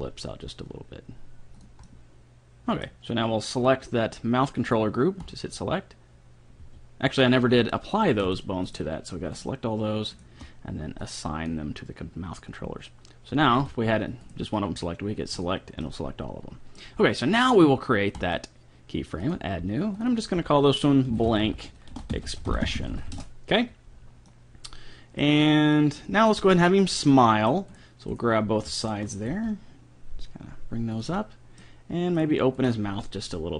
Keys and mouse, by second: 1.9-2.9 middle drag, 5.3-6.9 drag, 6.6 a, 8.3-12.0 right drag, 11.0-12.7 drag, 13.6 a, 14.3-17.2 right drag, 15.3-17.2 drag, 15.8 middle click, 16.4-18.2 middle drag, 18.2-22.0 drag, 22.7 s, 24.3-27.5 middle drag, 27.7 click, 27.7-29.3 right drag, 29.3 g, 31.2 middle click, 32.2 right click, 32.9 g.